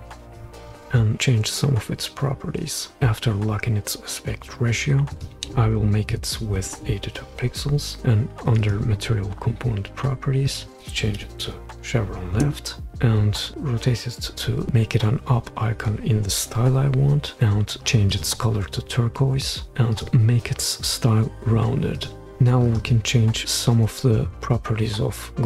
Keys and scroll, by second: 6.1-6.7 typing, 10.7-11.4 typing, 12.4 Return.